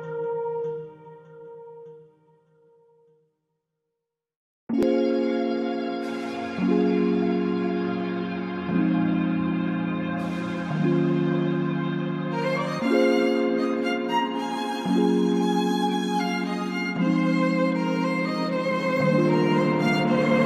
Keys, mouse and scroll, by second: 0.9 shift+middle click, 3.4 shift+middle click, 5.7 shift+click, 10.6 ctrl+f, 11.6 space, 11.7 Escape, 13.2 ctrl+f, 13.7 space, 14.5 space, 14.6 Escape, 14.7 Escape, 15.6 shift+click.